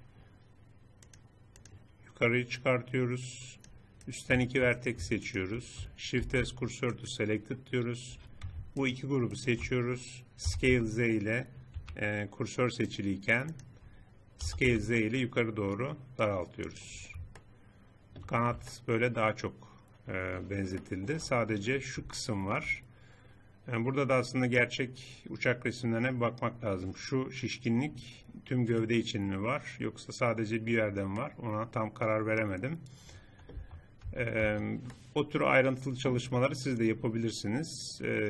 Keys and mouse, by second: 4.0 middle click, 6.2 shift+s, 9.7 click, 10.5 s, 13.6 click, 14.4 s, 17.0 click, 17.9-18.9 drag, 22.1 middle click, 26.0-28.3 middle drag, 28.3 middle click, 29.2-30.6 drag, 31.1-32.3 drag, 33.5 Tab, 34.1 Tab, 34.4 Tab.